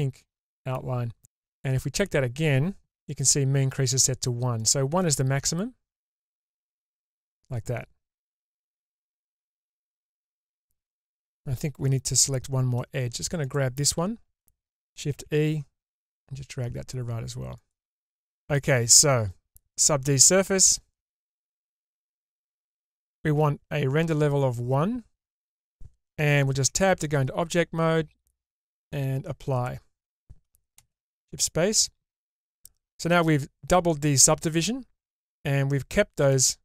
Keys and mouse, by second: 1.7 n, 4.5-7.0 drag, 8.4-10.0 middle drag, 15.1 shift+e, 19.7 click, 21.1-22.6 drag, 24.1-25.1 drag, 26.6 Tab, 28.6-29.6 drag, 30.8 shift+space, 31.4-35.4 middle drag, 36.3-36.6 middle drag.